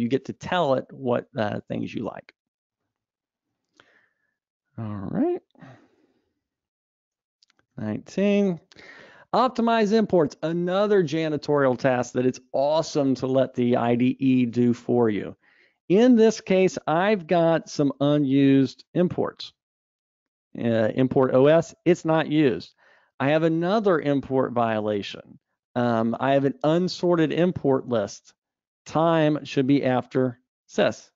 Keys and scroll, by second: 3.8 alt+Up, 5.1 Escape, 6.4 super+Up.